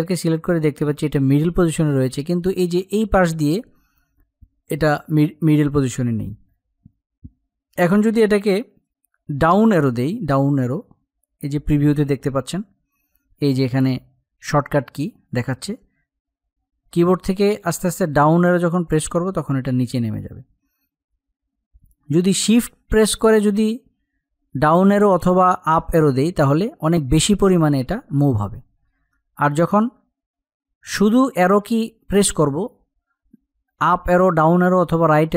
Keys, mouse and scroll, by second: 9.2 Down, 13.0 Down, 15.6 Down, 22.2 Up, 25.6 shift+Up, 30.4 Up.